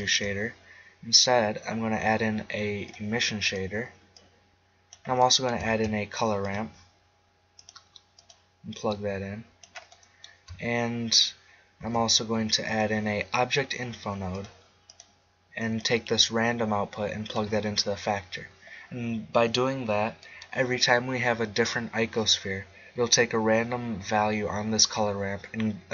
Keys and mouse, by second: 0.2 shift+a, 4.1-5.2 drag, 5.2 middle click, 5.7 shift+a, 8.8-9.8 drag, 9.8 middle click, 10.2 click, 11.8 shift+a, 15.0-20.2 drag, 20.2-22.2 middle drag.